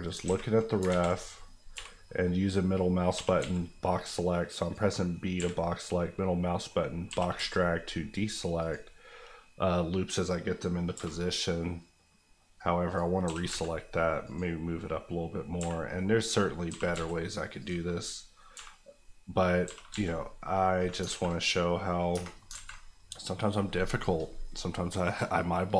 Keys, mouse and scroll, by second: 0.1 alt+click, 0.2 alt+a, 0.8 ctrl+z, 1.7 b, 2.0 middle click, 3.1 g, 3.4 z, 4.6 click, 5.3 b, 5.9 middle click, 7.0 g, 7.3 z, 8.6 click, 10.9 b, 12.5 click, 13.2 g, 13.5 z, 14.2 click, 15.6 b, 16.0 middle click, 16.6 g, 16.9 z, 17.6 click, 18.5 b, 18.9 middle click, 19.6 g, 19.9 z, 20.7 click, 21.1 alt+a, 22.1 Tab, 22.2 scroll down 1, 22.5 alt+z, 22.8 middle click.